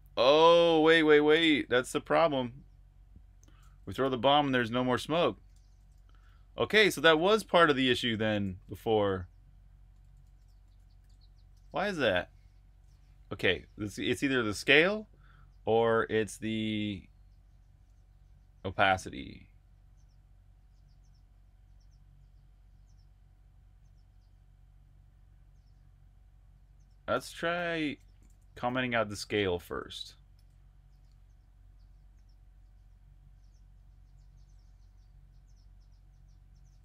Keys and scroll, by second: 0.0-1.2 typing, 2.9-11.2 typing, 11.4 super+q, 18.1-19.1 typing, 26.8-31.4 typing.